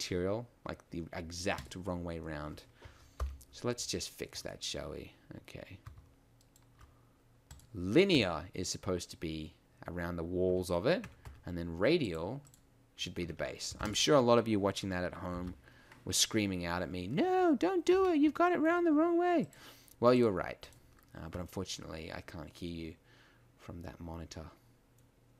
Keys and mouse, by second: 3.5 ctrl+i, 10.5 Tab, 11.0 Tab, 11.2 a, 13.2 Tab, 13.8 ctrl+s, 17.9 F12, 17.9 Escape, 24.2 middle click.